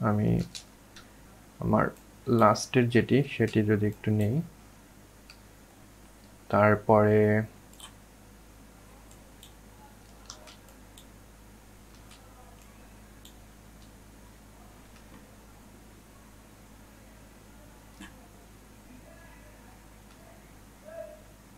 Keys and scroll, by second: 1.4 ctrl+z, 8.5 ctrl+z, 10.0 ctrl+z.